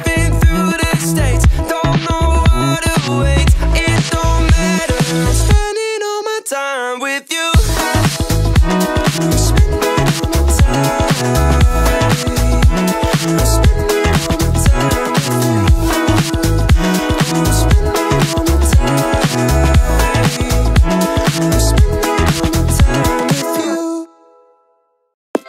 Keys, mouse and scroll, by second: 0.3-0.8 shift+middle drag, 1.4 click, 2.9 click, 3.8 click, 12.3-12.8 drag, 13.5-14.7 drag, 16.1 click, 16.6 shift+click, 19.1 click, 20.2-21.3 drag, 21.9 click, 23.1 click, 24.2-24.6 scroll down 1.